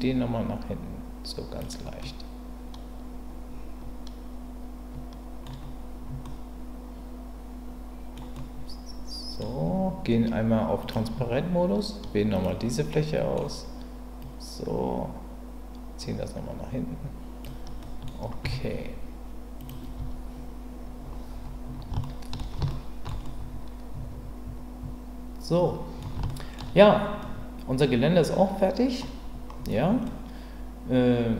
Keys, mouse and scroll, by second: 2.0-5.4 middle drag, 6.2-8.2 middle drag, 8.4-9.4 middle drag, 10.8 click, 12.3 click, 12.9 middle click, 14.2-17.4 drag, 17.8 middle click, 20.0 Tab, 22.0-22.4 shift+middle drag, 22.7-23.1 ctrl+middle drag, 23.2-26.0 middle drag, 26.3 shift+middle drag, 27.2-29.0 middle drag, 30.0-31.3 middle drag.